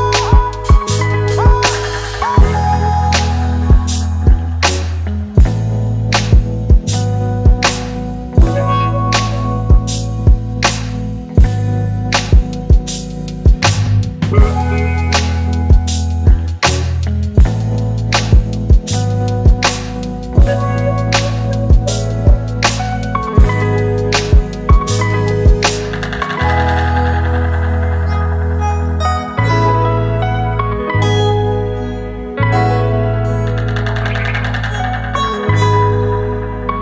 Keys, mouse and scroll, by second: 2.0 alt+scroll down 1, 3.5 alt+scroll up 1.